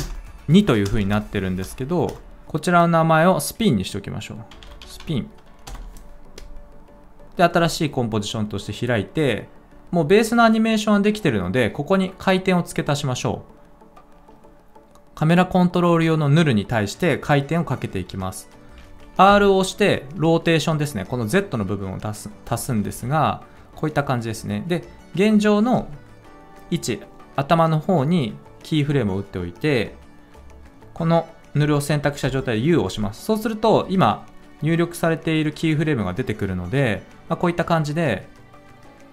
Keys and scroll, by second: 0.0-1.5 typing, 4.2-5.4 typing, 5.6 Return, 19.2 r, 22.8 ctrl+z, 32.1 u.